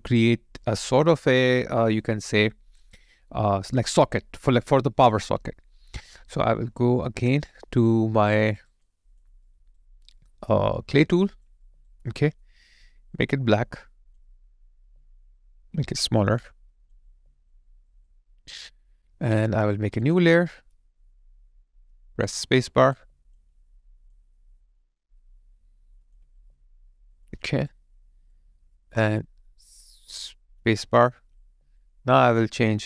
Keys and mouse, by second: 0.3 alt+click, 0.9 alt+right click, 8.5 alt+right click, 8.9 alt+click, 9.5 alt+right click, 10.1 alt+middle click, 11.5 alt+middle click, 11.6 alt+right click, 12.1 alt+middle click, 14.7 alt+middle click, 17.0 alt+middle click, 17.1 alt+click, 17.7 alt+right click, 18.1 alt+click, 22.4 space, 23.0 alt+click, 26.2 alt+click, 30.6 space, 31.4 alt+click.